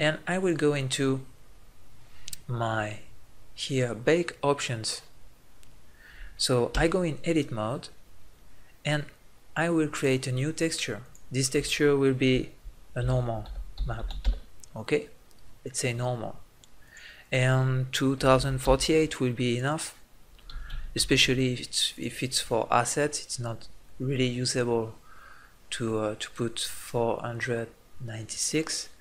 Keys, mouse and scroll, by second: 1.5-3.4 drag, 6.7 Tab, 21.5 click.